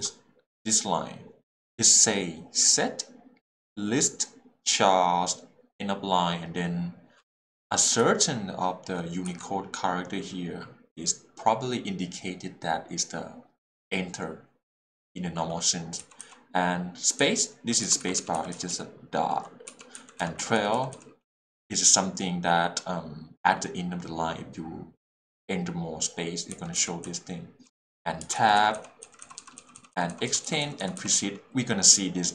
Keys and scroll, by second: 8.0 l, 19.7 h, 19.9 l, 26.5 l, 28.2 h, 28.3 l.